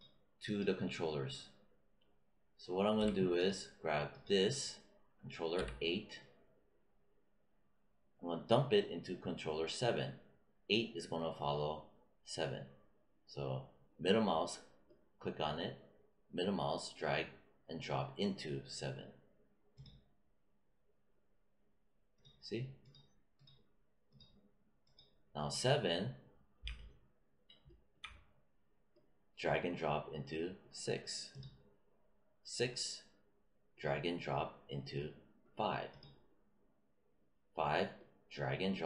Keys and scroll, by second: 2.9 w, 5.5 q.